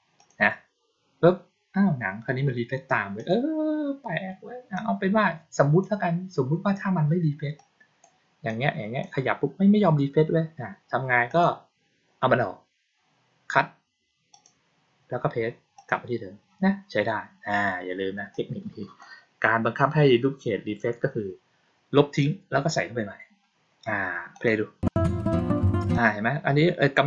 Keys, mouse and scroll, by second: 0.0 click, 3.0 click, 4.6-5.7 drag, 7.4 click, 8.4 click, 11.2 click, 14.2 click, 15.6 click, 18.2-18.9 drag, 24.2 click, 25.8 click.